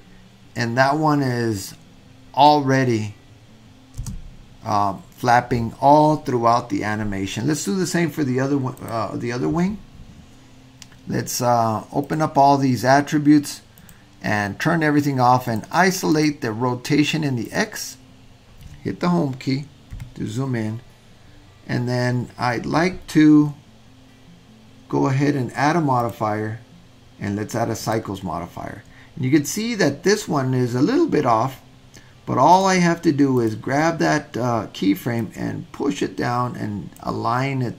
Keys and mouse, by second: 4.1 space, 12.0 click, 13.8-14.1 drag, 15.5 click, 16.1 click, 17.4 click, 19.9 Home, 26.1-30.2 drag, 32.5 click, 33.3 click, 35.2-37.1 drag.